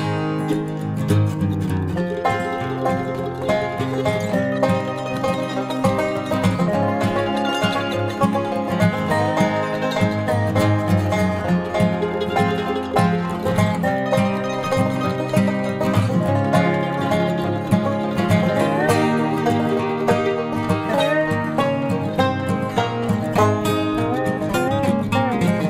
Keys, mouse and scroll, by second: 2.6 middle click, 2.9-6.7 middle drag, 6.9 middle click, 8.5 ctrl+r, 11.9-18.5 middle drag, 19.8 ctrl+r, 22.1-23.5 right drag, 22.8 KP_Decimal, 24.0 middle click, 24.3 g.